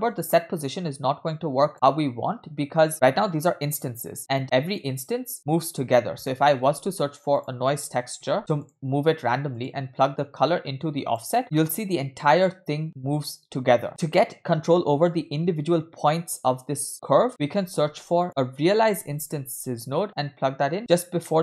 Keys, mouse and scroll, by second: 0.0-0.7 scroll down 2, 0.3 middle click, 0.9 click, 1.1 click, 2.0-2.7 scroll up 4, 4.4 space, 4.9 space, 6.3 middle click, 6.6 shift+a, 10.0-11.2 drag, 15.1-16.0 scroll up 2, 17.4 middle click, 17.6 shift+a, 21.2 middle click.